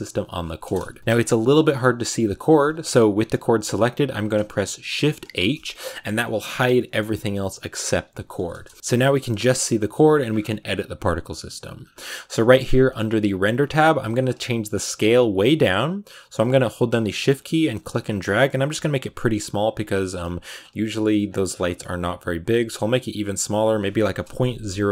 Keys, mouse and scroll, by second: 1.0 KP_Decimal, 1.3 middle click, 1.6 scroll up 2, 2.8 g, 5.2 shift+h, 5.7 middle click, 6.1 a, 6.3 scroll down 2, 6.6 middle click, 7.6 right click, 8.4 KP_0, 8.7 a, 8.9-14.3 shift+middle drag, 14.3-21.2 shift+drag, 21.3 scroll up 5, 24.8 click.